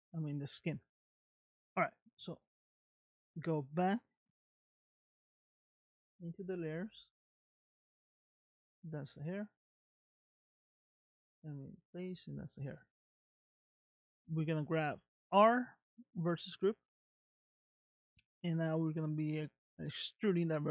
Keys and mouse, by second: 0.3 middle click, 2.9 click, 6.7 click, 8.2 click, 9.6 click, 10.3 click, 12.8 middle click, 14.2 click, 15.4-16.9 middle drag.